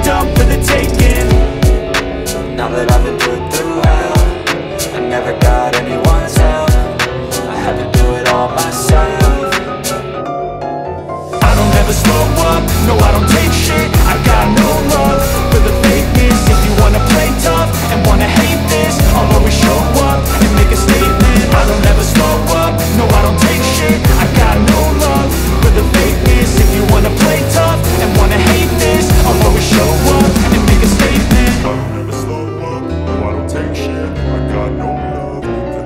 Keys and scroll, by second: 3.6 shift+F2, 4.0 F3, 8.5 Escape, 8.8 F3, 9.4 F2, 13.4 Escape, 13.6 F4, 14.8 F2, 17.5 F4, 19.4 e, 19.9 shift+F2, 20.4 Escape, 25.0 c, 25.2 Escape, 27.0 Escape, 27.3 F4, 31.1 shift+F2, 31.4 F3.